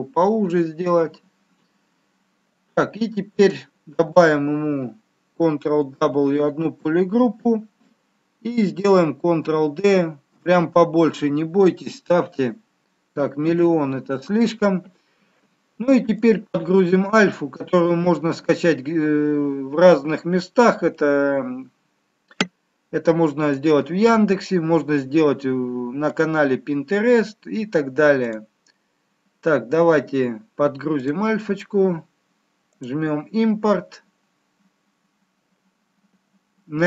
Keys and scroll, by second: 5.8 ctrl+w, 8.9 ctrl+d, 13.8 ctrl+z.